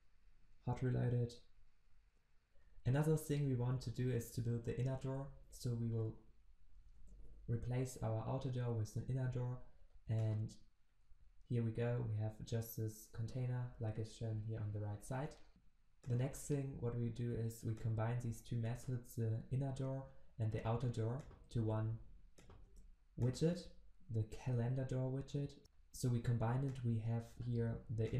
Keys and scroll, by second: 5.5 ctrl+v, 10.5 ctrl+b, 21.6 ctrl+v.